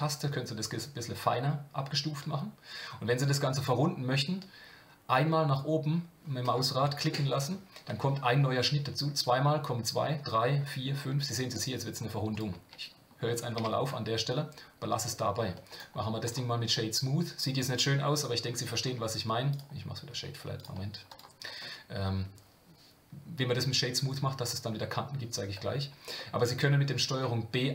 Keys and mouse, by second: 13.6 Tab, 13.9-15.1 middle drag, 15.8-16.3 right drag, 16.7-18.4 middle drag, 18.9 Tab, 19.5 right click, 20.1 Tab, 20.6-21.2 right drag, 26.2 middle click, 26.5 drag.